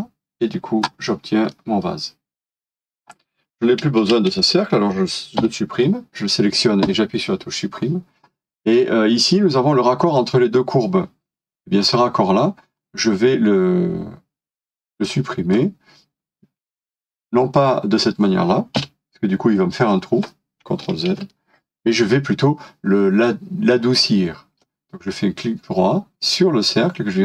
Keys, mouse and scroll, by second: 1.5 middle click, 1.6 scroll up 1, 5.4 Delete, 8.3 middle click, 11.8 scroll up 1, 12.8 scroll down 1, 18.8 Delete, 21.1 ctrl+z.